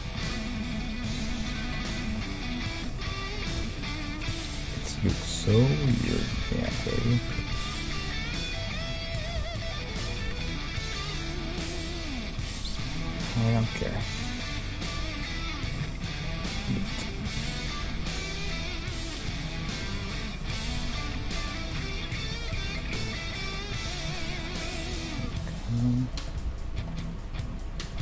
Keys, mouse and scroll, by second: 0.1 middle click, 0.5-2.2 right drag, 2.2-4.9 middle drag, 5.1 KP_1, 5.7-6.2 scroll down 1, 6.2 scroll up 1, 7.4 ctrl+Tab, 8.7-11.1 right drag, 9.8 g, 14.4-19.2 right drag, 17.8 g, 20.9-26.3 middle drag, 21.8 ctrl+Tab, 23.0-24.7 right drag, 23.7 g, 26.0 right click, 26.3 g.